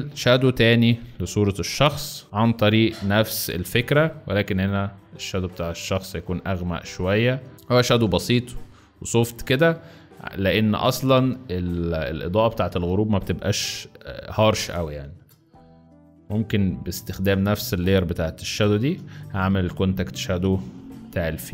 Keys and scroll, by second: 0.7 ctrl+b, 1.6 [, 2.2 [, 3.6 x, 7.1-8.3 typing, 9.4 x, 11.9 z, 14.6 space, 15.3 z, 17.2 space, 18.0 z, 19.0 b, 20.7 x.